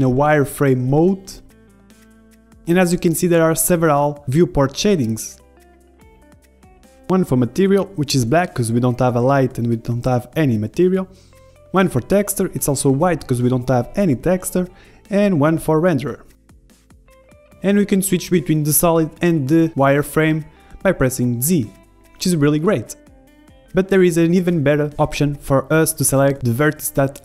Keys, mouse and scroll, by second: 0.8-2.0 middle drag, 2.4 z, 6.3-8.9 drag, 10.4-12.3 drag, 12.7-14.9 drag, 15.1-17.2 drag, 18.2-20.0 middle drag, 20.0-21.6 typing, 22.6 z, 23.1 z, 24.9-27.1 middle drag.